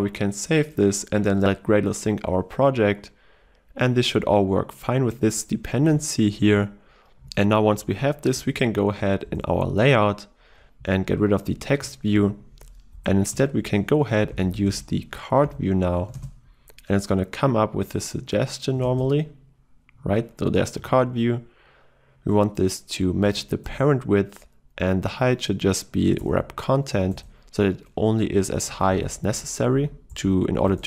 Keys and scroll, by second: 0.4 ctrl+s, 8.5 ctrl+e, 16.5 Tab, 16.7 ctrl+space, 23.7 Return, 23.9 Return.